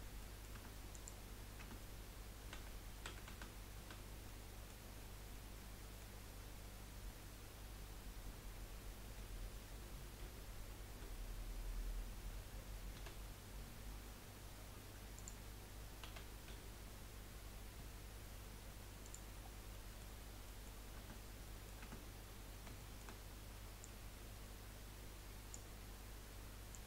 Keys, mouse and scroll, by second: 0.3 middle click, 0.5 Tab, 0.9 click, 1.6 Tab, 2.5 a, 3.1 a, 3.3 a, 3.8 a, 4.2 middle click, 4.9-5.3 scroll up 1, 5.3-9.0 middle drag, 9.0 KP_1, 10.2 z, 12.9 s, 16.4 s, 19.4 scroll down 3, 19.9-20.9 middle drag, 20.9 Tab, 21.4 middle click, 21.8 Tab, 22.1 scroll up 2, 22.8-23.8 shift+middle drag, 23.8 click, 25.8-26.7 scroll up 1, 26.7 click.